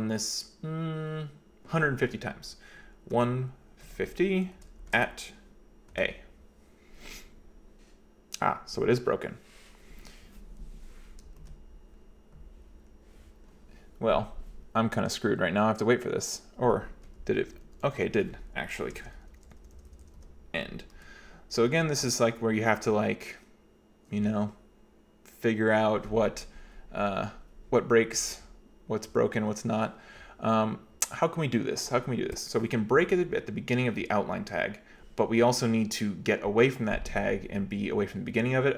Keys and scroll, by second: 3.2-4.9 typing, 6.0 a, 11.5 ctrl+c, 17.0-23.2 typing.